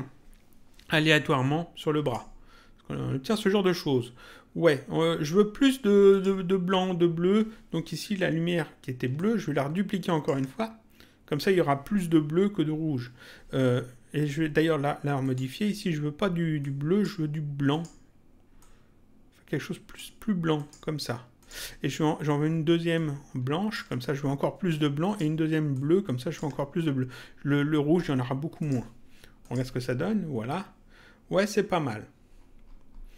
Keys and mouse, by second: 2.0 click, 6.1 click, 9.2 ctrl+click, 15.2 click, 16.6 click, 17.7 click, 20.6 click, 23.0 ctrl+click, 25.0 click, 25.7 ctrl+click, 28.6 click.